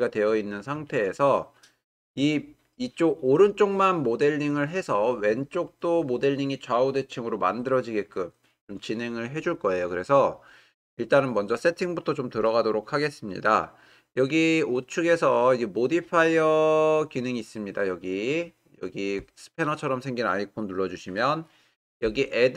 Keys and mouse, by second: 3.6-4.5 drag.